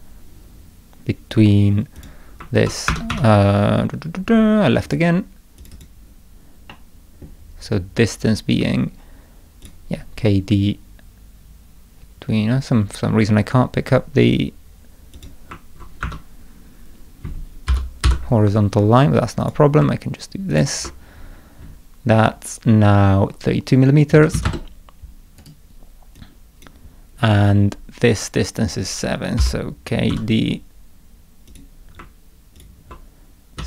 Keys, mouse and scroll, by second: 2.0 click, 2.9 Escape, 3.1 Escape, 4.9 click, 5.6 click, 5.7 click, 6.7 middle click, 9.6 click, 15.2 click, 16.0 Escape, 17.7 k, 18.1 d, 19.4 click, 20.5 ctrl+click, 25.4 right click, 26.2 click, 29.4 k, 30.1 d, 31.5 click, 32.6 ctrl+click.